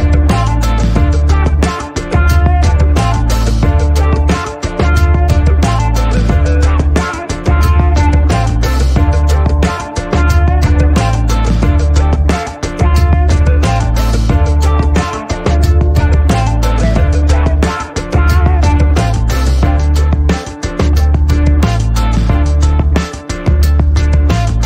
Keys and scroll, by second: 1.1 g.